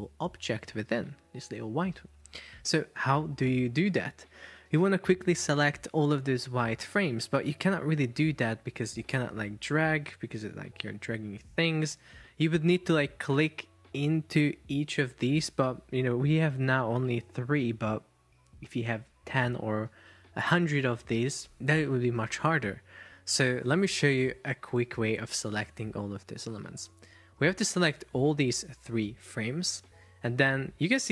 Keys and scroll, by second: 11.0 super+z.